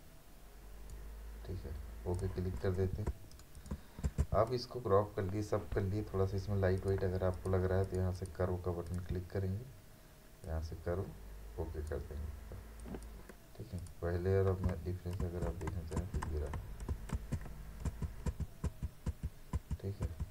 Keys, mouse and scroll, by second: 3.1 space, 3.3 right click, 3.6 click, 4.1 v, 6.8-12.8 drag, 15.2 ctrl+alt+z, 16.0 ctrl+z, 17.1 ctrl+alt+z, 17.9 ctrl+z.